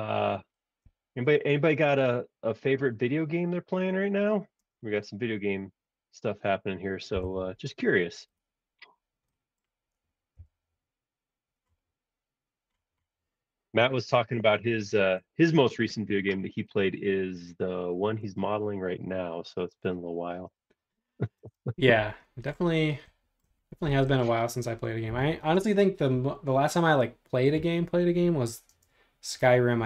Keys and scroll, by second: 4.6 space, 7.1 p, 8.0 space, 10.3 l, 18.3 space, 19.2 p, 20.4-21.5 typing, 25.1 b.